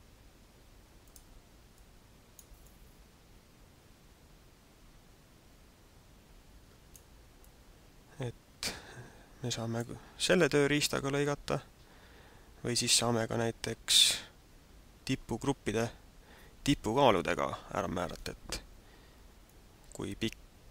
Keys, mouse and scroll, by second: 1.1 click, 1.7 click, 2.7 click, 7.4 click, 19.5 middle click.